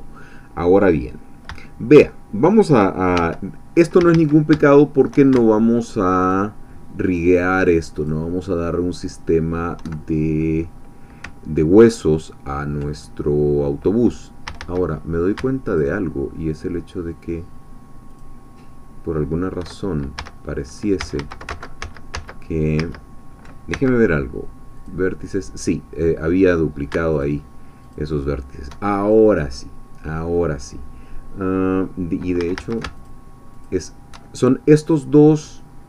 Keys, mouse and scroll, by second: 1.0 scroll down 1, 1.2 middle click, 1.6-2.9 shift+drag, 3.2 1, 4.0 a, 4.7 shift+middle click, 5.8 alt+shift+click, 7.2 alt+shift+click, 8.1-9.8 alt+shift+drag, 10.4 scroll up 2, 11.0 scroll up 2, 14.4 a, 15.6 alt+shift+click, 18.1 alt+shift+click, 20.2 a, 21.5 ctrl+z, 23.7 ctrl+x, 24.8-26.9 drag, 27.2 alt+shift+click, 27.9 alt+shift+click, 29.9-32.2 scroll down 2, 32.2 scroll down 1, 32.4 a, 33.0 alt+shift+click.